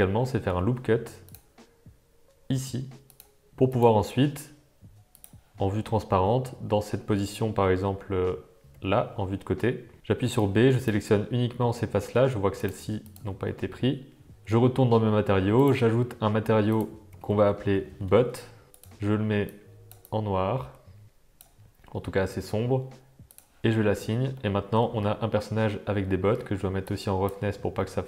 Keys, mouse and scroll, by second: 0.4 ctrl+r, 3.7 click, 5.2 click, 9.9 v, 10.0 b, 11.7 middle click, 13.4 middle click, 15.6-16.2 drag, 16.7-18.5 drag, 17.6 t, 18.7 click, 23.2 click, 23.8 Tab, 24.3-24.8 middle drag, 26.9 click, 27.7-28.0 middle drag.